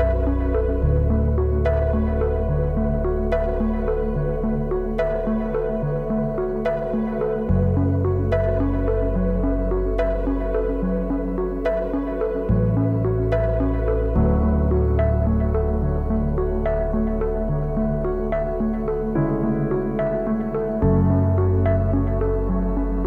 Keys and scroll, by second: 20.5 v.